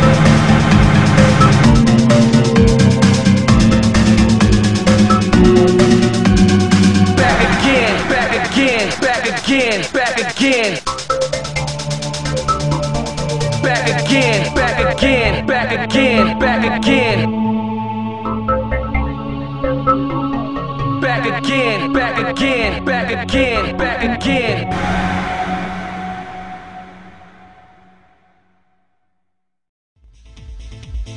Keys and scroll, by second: 1.7 ctrl+z, 7.2 ctrl+z, 14.9 ctrl+z, 29.7 ctrl+z.